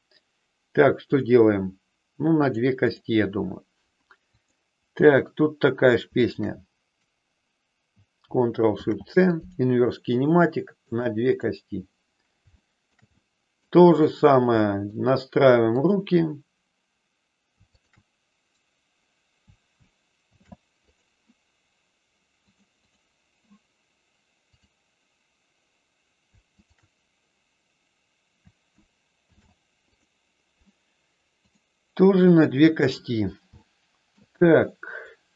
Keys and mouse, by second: 1.0 click, 2.4 click, 2.8 click, 4.2-5.6 drag, 6.2-7.4 shift+drag, 9.4 ctrl+shift+c, 11.3 click, 12.5 shift+middle click, 13.0 middle click, 14.5 shift+middle click, 17.8-19.0 shift+drag, 20.2 ctrl+shift+c, 22.4 click, 22.6 click, 24.5-25.8 drag, 32.2 click, 33.6 shift+middle click, 34.5-35.3 middle drag.